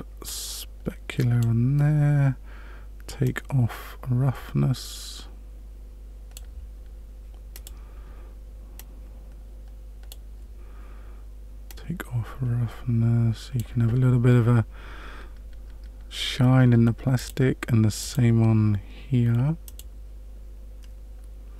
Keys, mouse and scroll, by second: 0.5 click, 3.2 click, 7.5 click, 8.7 click, 11.6 click, 17.1 click, 18.0 click, 19.6 click.